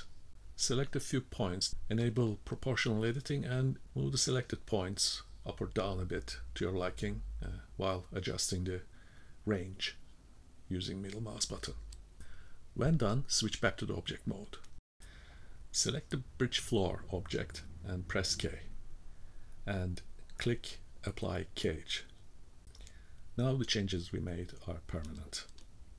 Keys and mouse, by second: 1.6 click, 3.0 g, 9.5 click, 10.4 g, 11.4 click, 11.6 g, 13.2 click, 14.1 v, 14.7-15.2 middle drag, 15.7 click, 18.5 k, 19.6-20.9 drag, 23.2 click, 24.1 click, 25.6 click.